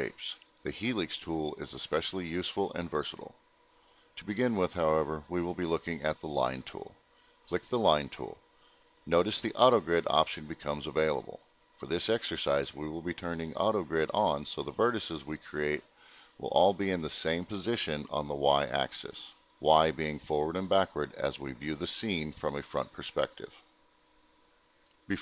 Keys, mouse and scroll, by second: 0.4 click, 6.6 click, 13.5 click.